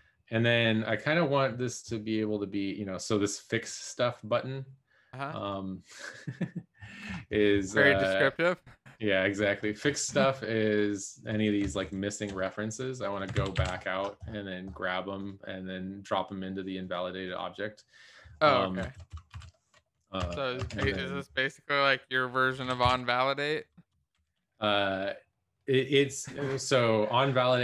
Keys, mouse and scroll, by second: 13.6 ctrl+s, 18.9 Return, 19.1 Return, 19.3 Up, 20.4 Tab, 20.5 Tab, 20.7 Tab, 22.3-24.1 typing, 23.8 Return.